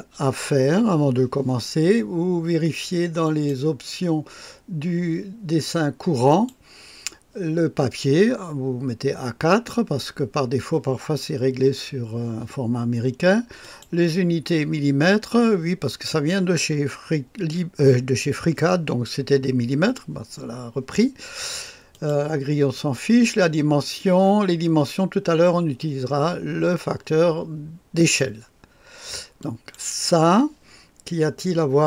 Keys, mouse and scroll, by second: 3.2 click, 6.2 click, 13.5 click, 21.8 click, 22.7 click, 29.3 click.